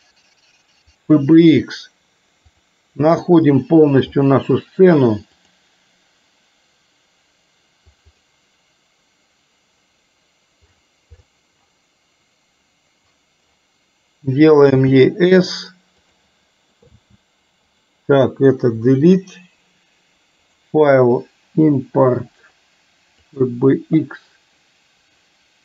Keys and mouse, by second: 1.1 click, 14.8 s, 17.1 s, 18.9 Delete, 23.6 click.